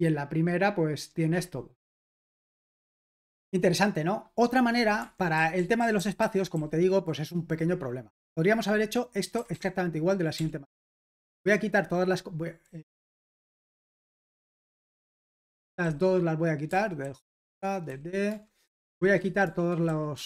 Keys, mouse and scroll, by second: 2.1-5.0 scroll down 2, 5.0 Escape, 5.3-6.9 typing, 9.5-10.3 typing, 12.8 typing, 15.4-20.2 typing.